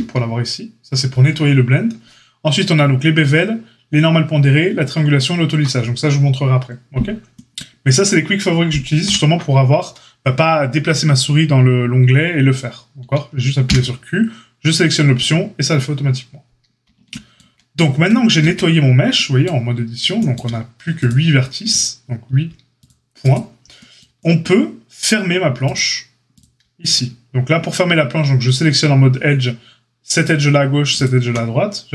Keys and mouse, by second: 9.0 q, 13.6 q, 18.4 Tab, 21.0 middle click, 21.7-23.3 drag, 23.3-25.7 middle drag, 25.7 click, 26.3-31.9 shift+middle drag.